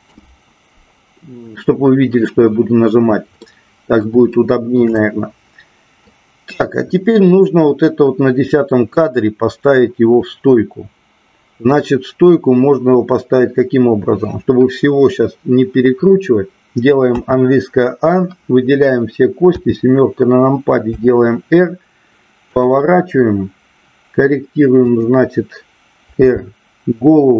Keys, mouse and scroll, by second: 3.4-4.1 middle drag, 4.4-4.8 shift+middle drag, 4.9-6.0 middle drag, 19.4 KP_7, 20.8 r, 22.4 click, 24.9-25.9 drag, 26.2 r.